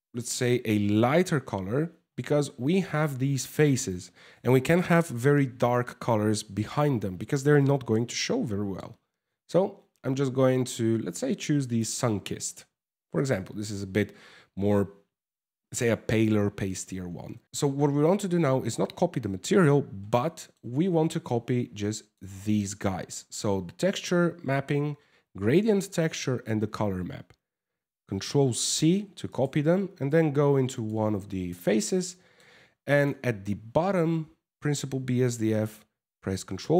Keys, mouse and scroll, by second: 2.3 scroll up 4, 17.4 middle click, 17.4 scroll down 4, 19.8 middle click, 20.9 click, 22.8 m, 28.2 ctrl+c, 28.9 right click, 30.4 right click, 31.4 middle click, 32.6 click, 36.1 ctrl+v.